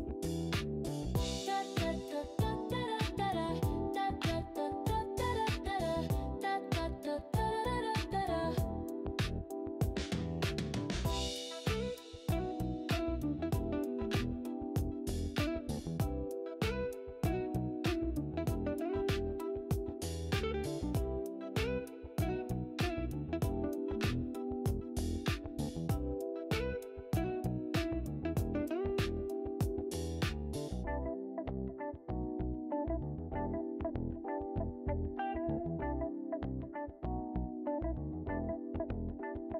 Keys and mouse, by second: 2.7-3.0 drag, 4.2 click, 11.6 click, 12.3 click, 14.8-15.2 drag, 16.4 click, 18.2 click, 19.9 click, 28.1 click, 30.7 click, 32.2 click, 36.0 click.